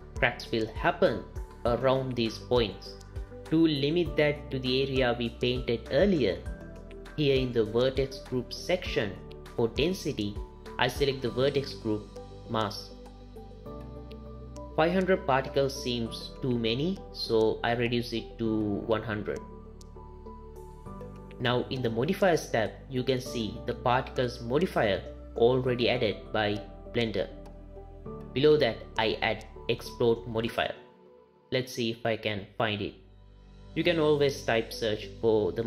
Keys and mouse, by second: 8.7 click, 9.9-12.1 drag, 17.3-18.5 drag, 18.3 KP_0, 19.8 click, 22.0 click, 29.1-35.6 drag.